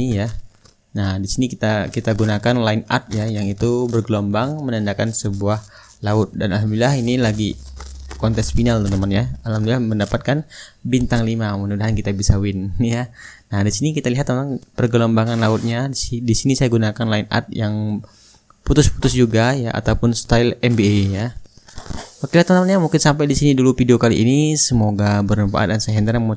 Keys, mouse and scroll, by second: 1.7-3.0 drag, 3.0-4.1 middle drag, 4.1 click, 4.3-5.4 middle drag, 6.7-9.4 middle drag, 10.5 click, 11.0-14.5 middle drag, 14.5 shift+click, 14.5-16.3 shift+right drag, 16.3 middle click, 16.5-21.4 right drag, 21.6-25.7 middle drag.